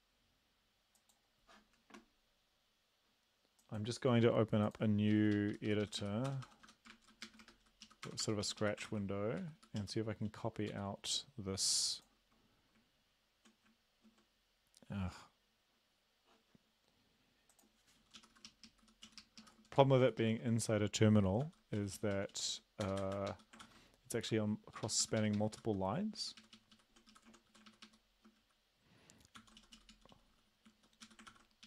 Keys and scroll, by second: 5.4 Up, 5.5 Up, 5.7 Up, 5.8 Up, 6.0 Up, 6.3 Return, 6.5 Return, 6.7 Return, 6.9 Return, 7.8 Left, 8.1 Return, 8.2 Return, 8.4 Up, 8.6 Up, 8.8 ctrl+v, 9.4 Up, 9.6 Up, 9.8 Down, 10.7 End, 18.2 Up, 18.3 Up, 18.5 Left, 18.7 Left, 19.0 Down, 19.2 Left, 19.4 Left, 19.7 shift+End, 20.0 shift+Left, 20.2 shift+Left, 21.4 ctrl+c, 21.8 Down, 22.0 Down, 22.1 Down, 22.3 Down, 22.5 Down, 22.8 Return, 23.0 Return, 23.1 Return, 23.3 Up, 23.6 ctrl+v, 24.7 Up, 24.8 Up, 25.0 Up, 25.2 Up, 25.3 Up, 25.8 Up, 26.2 ctrl+Right, 26.4 ctrl+Right, 26.5 ctrl+Right, 26.7 ctrl+Right, 27.1 Left, 27.5 shift+Right, 29.4 ctrl+c, 29.6 Down, 29.7 Down, 29.9 Down, 30.1 Down, 30.3 Down, 30.7 Down, 31.0 Up, 31.3 ctrl+v, 31.6 Up.